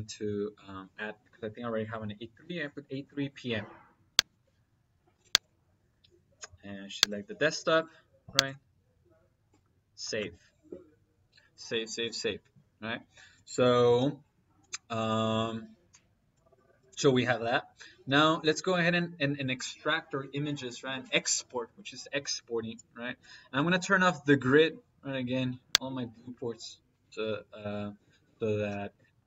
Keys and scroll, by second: 24.8 F7, 25.7 F7.